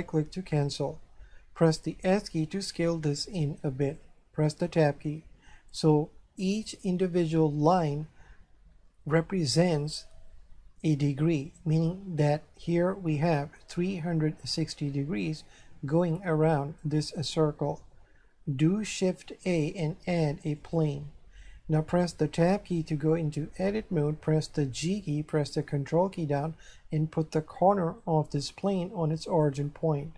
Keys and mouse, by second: 1.9 s, 3.9 click, 4.7 Tab, 18.9 shift+a, 20.6 click, 22.4 Tab, 24.6 g, 29.3 ctrl+click.